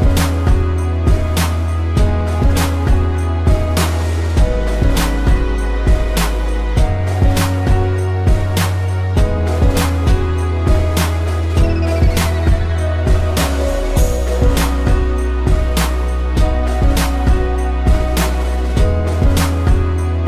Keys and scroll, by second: 4.1 ctrl+z, 9.5 a, 14.2 Delete, 15.9 ctrl+-, 17.0 space, 19.3 z.